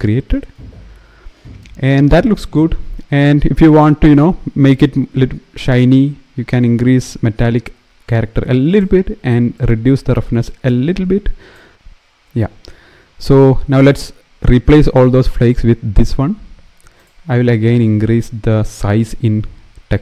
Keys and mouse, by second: 6.2-8.5 drag, 9.4-11.3 drag, 16.7 click, 18.6-20.0 drag.